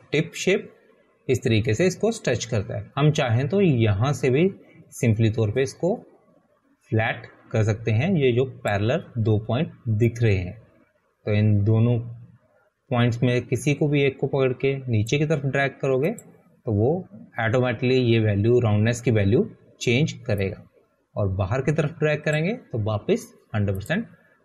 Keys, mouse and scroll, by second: 9.6 click, 10.9 click.